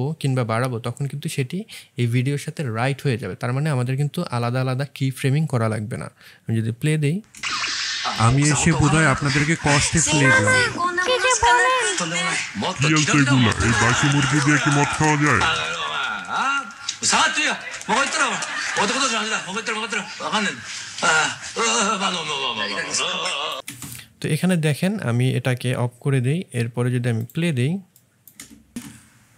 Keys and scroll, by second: 7.3 space, 23.6 space, 28.3 space.